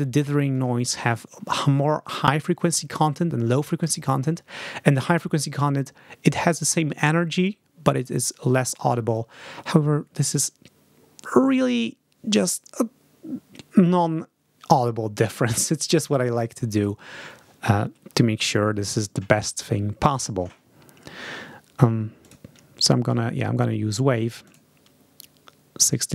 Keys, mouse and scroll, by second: 22.1 click, 24.3 click.